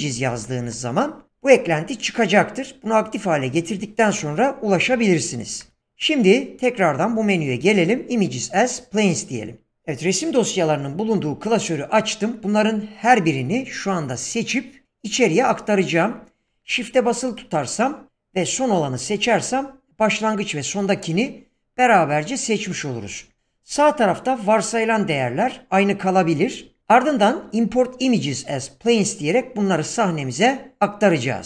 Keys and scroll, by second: 0.0-1.1 typing, 5.5 shift+a.